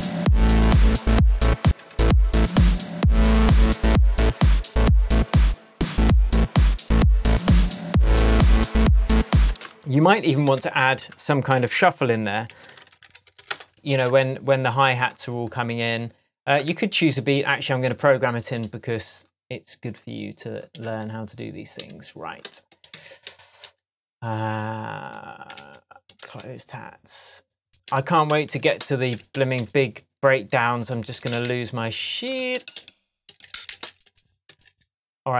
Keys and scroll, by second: 1.6 space, 5.4 space, 9.4 space, 10.4 super+t, 11.8 shift+super+r, 12.5 shift+super+s, 12.7 typing, 16.5 BackSpace, 20.7 Up, 25.4 Down, 27.8 Up.